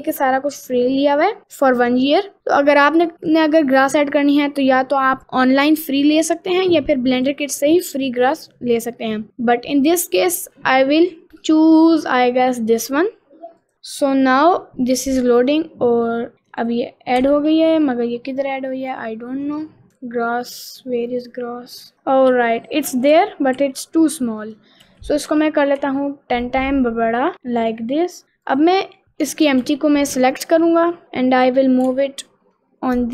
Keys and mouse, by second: 0.4 middle click, 1.2 middle click, 15.2 click, 16.2 middle click, 17.2 h, 21.1 click, 21.9 s, 22.4 s, 23.2 a, 23.6 s, 24.9 s, 26.9 middle click, 27.3 middle click, 27.3 s, 28.5 click, 29.0 h, 29.0 x, 29.4 ctrl+z, 29.6 g, 31.9 g.